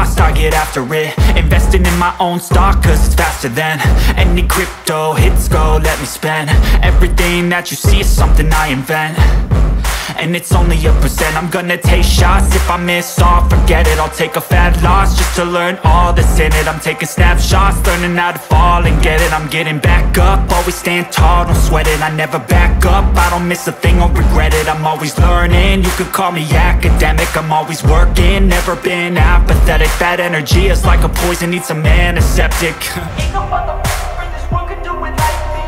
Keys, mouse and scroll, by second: 3.8-4.5 scroll down 1, 7.6-9.7 drag, 10.7 scroll up 1, 12.2-14.7 drag, 26.2 click, 29.3 scroll up 1, 30.7 click.